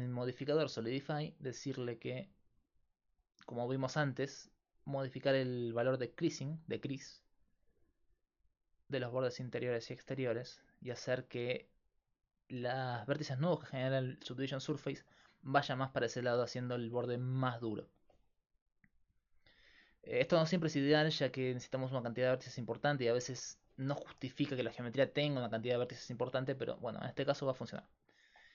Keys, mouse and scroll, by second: 0.1-13.9 drag, 18.8-24.0 drag, 24.0-27.7 middle drag.